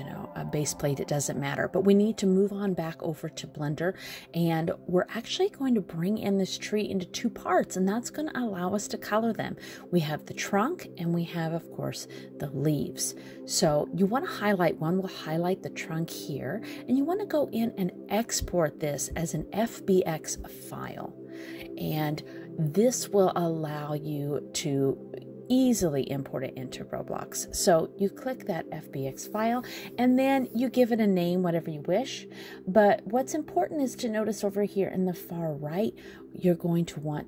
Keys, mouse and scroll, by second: 12.7 click, 21.9 click.